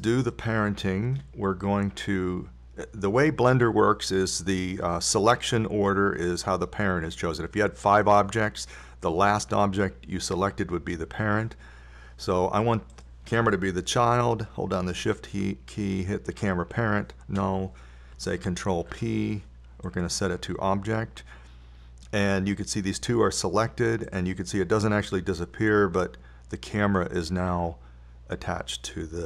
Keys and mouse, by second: 1.7-4.6 middle drag, 14.4-16.2 drag, 17.8 click, 20.1 ctrl+p, 25.4-27.2 drag.